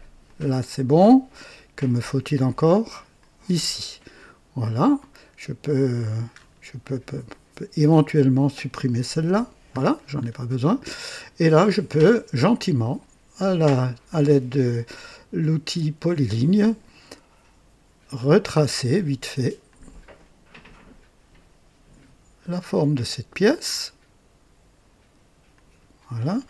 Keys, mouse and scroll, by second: 0.1 click, 3.0 click, 4.9 right click, 6.2-6.5 scroll up 2, 6.7 right click, 7.8 click, 9.1 Delete, 9.6-10.3 scroll down 2, 10.5-11.2 right drag, 12.6 click, 18.0 click, 19.5 click, 22.6 click, 25.4 click.